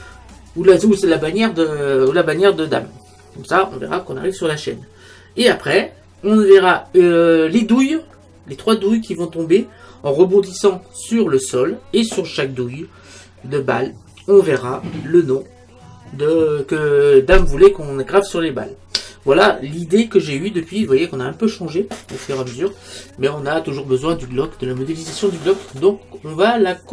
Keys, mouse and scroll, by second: 26.0-26.9 middle drag.